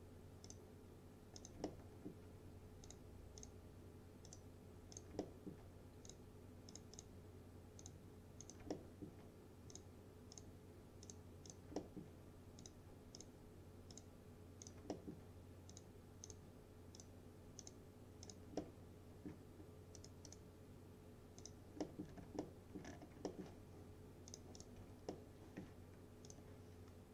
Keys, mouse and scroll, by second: 1.6 click, 1.7-2.3 alt+middle click, 2.9 click, 5.3 alt+middle click, 6.1 click, 8.8 alt+middle click, 9.8 click, 11.8 alt+middle click, 12.7 click, 14.8 click, 15.0 alt+middle click, 15.8 click, 18.6-19.6 alt+middle drag, 20.0 right click, 21.4 click, 21.9 middle click, 22.1 scroll down 1, 22.5-23.1 alt+middle click, 22.9 scroll down 1, 23.3 alt+middle click, 24.4 click, 24.8 F4, 25.2-25.8 middle click, 26.3 click.